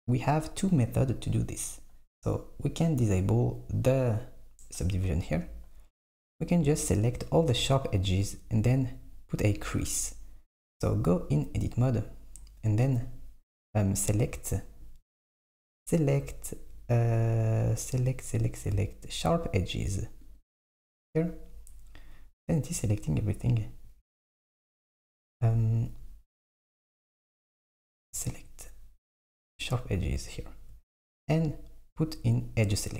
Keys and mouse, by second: 4.1 click, 5.3 Tab, 6.4 click, 12.9-16.0 drag, 24.6 shift+click, 26.4-27.5 drag, 28.4-30.3 drag.